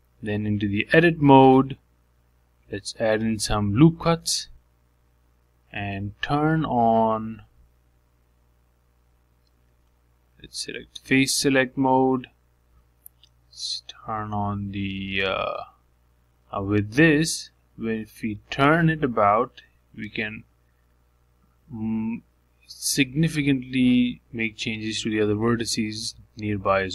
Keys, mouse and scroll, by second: 1.2 g, 3.1 Tab, 4.8 ctrl+r, 8.5 alt+click, 9.4 alt+click, 10.0-12.1 scroll up 2, 12.1 3, 13.3 alt+click, 14.0-14.9 scroll down 1, 14.9 click, 16.1 g, 20.0 r, 25.3 Tab.